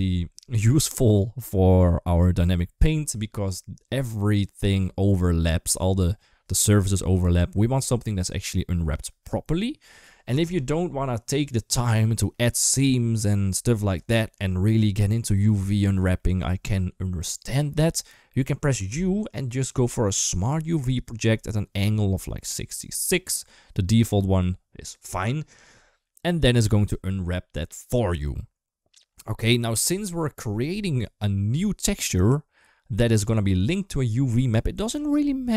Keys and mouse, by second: 12.2-13.2 middle drag, 13.9 shift+middle click, 15.5 middle click, 16.0 shift+middle click, 18.7 u.